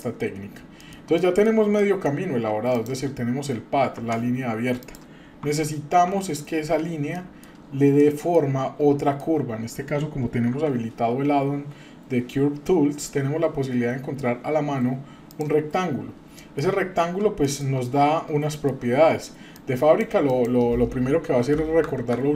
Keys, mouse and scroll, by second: 0.0 middle click, 0.2-0.9 scroll down 3, 0.8 middle click, 1.1-1.5 shift+middle drag, 1.8 middle drag, 2.2-2.7 scroll up 2, 2.7 click, 3.9 Tab, 4.8 click, 5.4 Tab, 6.1 Tab, 7.1 middle click, 7.6 shift+scroll up 1, 8.0-8.4 shift+middle drag, 8.5-9.0 scroll up 3, 9.0-9.3 shift+middle drag, 9.3-9.7 shift+scroll down 1, 10.5 shift+a, 15.8-16.4 scroll down 3, 16.4 shift+middle click, 16.8-17.2 scroll up 1, 17.4 shift+middle click, 17.8-18.3 scroll up 2, 18.5 shift+middle click, 19.5 click, 20.3-22.3 drag.